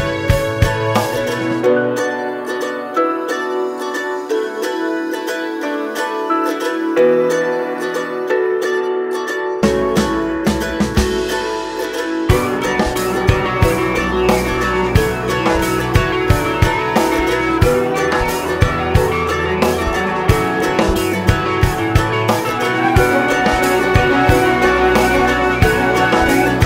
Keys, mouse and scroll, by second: 2.2 `, 3.1 scroll down 1, 3.3 `, 4.5 scroll up 1, 5.0 Tab, 5.6 scroll down 1, 5.9 scroll up 1, 6.1 Tab, 6.2 `, 6.8 `, 7.2 scroll up 1, 7.3 `, 7.7 ctrl+r, 9.4 1, 9.6 click, 9.7 scroll down 1, 10.0 scroll up 1, 10.3 click, 11.0 shift+click, 11.7 g, 13.9 click, 14.1 shift+click, 14.5 g, 14.9 click, 15.1 g, 16.7 click, 17.1 `, 18.2 e, 19.9 1, 19.9 click, 20.7 g, 21.1 right click, 21.2 ctrl+z, 21.6 g, 23.1 `, 23.9 3, 24.1 click, 24.3 alt+click, 24.5 2, 24.6 alt+click, 25.5 click, 26.3 ctrl+e.